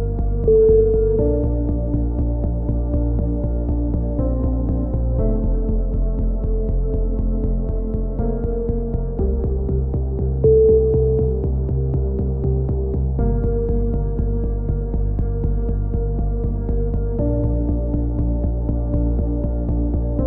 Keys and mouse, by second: 0.2 KP_3, 0.4 Tab, 1.0 z, 1.7 ctrl+z, 1.9 ctrl+z, 2.7 ctrl+z, 3.0 ctrl+z, 3.2 ctrl+z, 4.9 ctrl+i, 5.4 x, 5.8 z, 6.0-6.3 middle drag, 6.3-6.9 drag, 8.2 KP_1, 8.7 z, 9.2-9.8 drag, 10.1 z, 10.8-12.5 drag, 13.6 KP_1, 13.6 drag, 14.4 click, 15.0-15.5 drag, 16.3 a, 16.5-17.1 drag, 17.9-18.4 drag, 17.9-18.4 right drag, 19.6 f, 19.6 a.